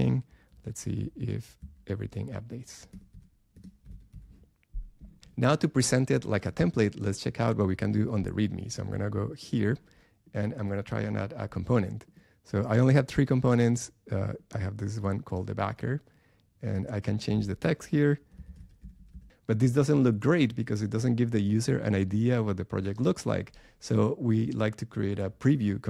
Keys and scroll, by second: 2.9 BackSpace.